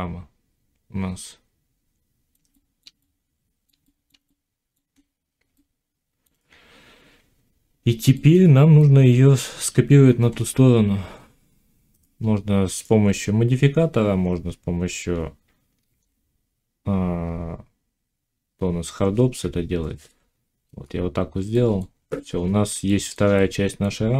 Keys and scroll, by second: 15.8 alt+x.